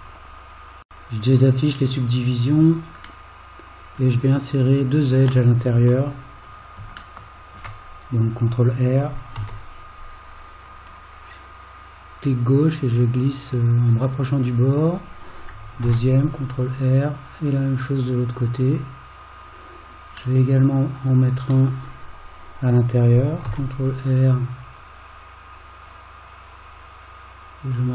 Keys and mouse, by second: 2.5 click, 3.3 middle click, 7.2 shift+middle click, 9.4 ctrl+r, 15.8 ctrl+r, 20.4-21.5 middle drag, 23.5 ctrl+r.